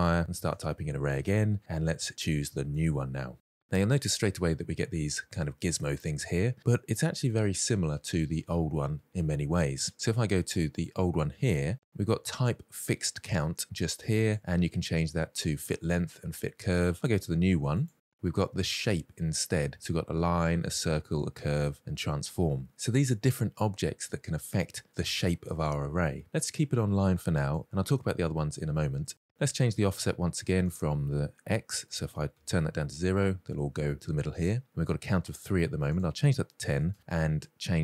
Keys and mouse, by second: 2.6 r, 3.4 shift+middle drag, 3.6-4.4 middle drag, 10.5 click, 14.0-16.9 drag, 17.4 click, 18.7-27.5 drag, 30.6-32.1 drag, 35.8-36.7 drag.